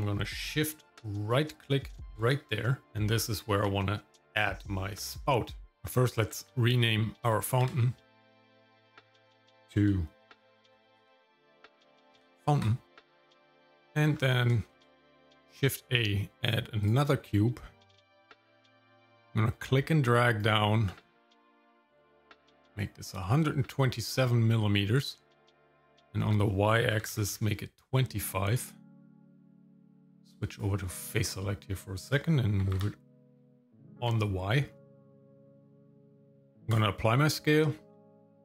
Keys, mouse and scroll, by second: 1.9 shift+right click, 2.8 shift+middle click, 2.8 scroll up 1, 8.4 click, 9.2 F2, 12.9 shift+middle click, 13.8 middle click, 14.1-14.5 scroll up 2, 14.7 shift+a, 18.8-22.0 drag, 23.6-23.9 scroll up 1, 25.7-27.4 drag, 29.4-30.8 drag, 32.6 g, 35.2-36.4 drag, 36.6 ctrl+a, 37.6 shift+middle click, 38.2 Tab.